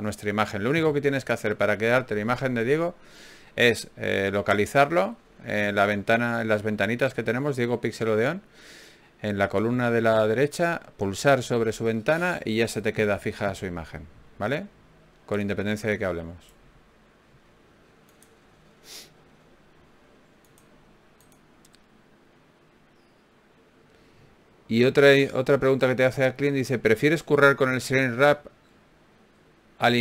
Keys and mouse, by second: 1.1 ctrl+Tab, 3.5 f, 3.9 click, 4.3 Tab, 6.1 Tab, 7.4 ctrl+z, 7.9 ctrl+z, 9.7 ctrl+Tab, 10.7 x, 12.4 ctrl+r, 14.0 s, 15.2 g, 16.0 s, 16.8-18.4 drag, 17.6 f, 19.2 ctrl+z, 19.6 ctrl+Tab, 20.4 click, 22.0 alt+m, 23.8 ctrl+Tab, 24.6-26.6 drag, 26.5 f, 27.0-28.9 drag, 27.2 f.